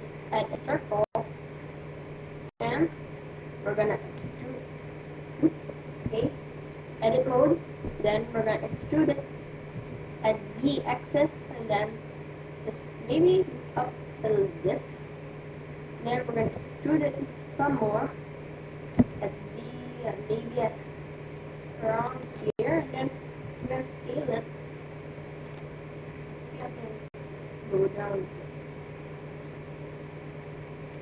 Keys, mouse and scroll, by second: 4.1 e, 7.3 Tab, 8.6 e, 16.4 e, 23.4 s, 26.6-28.2 drag.